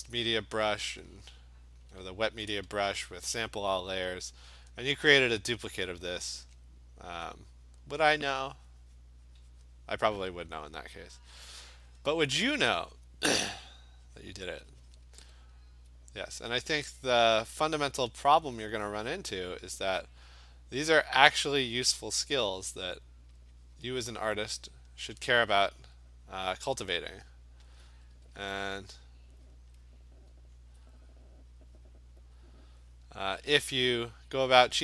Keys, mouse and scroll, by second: 2.7 ], 3.1 ], 5.8 alt+click, 6.4 click, 7.5 click, 7.7 click, 8.1 click, 8.2 alt+click, 9.8 click, 10.1 click, 11.4 alt+click, 11.6 alt+click, 12.2 click, 12.6 click, 15.0 click, 15.7 alt+click, 16.1 click, 16.7 click, 18.4 alt+click, 19.8 click, 21.4 click, 21.6 click, 21.8 click, 21.8 alt+click, 22.2 alt+click, 22.7 click, 22.9 click, 23.5 click, 24.8 click, 25.2 click, 26.1 click, 26.6 click, 26.8 alt+click, 27.8 alt+click, 27.9 alt+click, 27.9 ], 28.1 ], 28.3 ], 28.7 click, 29.0 click, 29.5 click, 29.9 click, 30.2 click, 30.7 alt+click, 31.4 click, 31.7 click, 31.9 click, 32.6 click, 32.9 click, 33.7 click, 34.3 click, 34.6 click.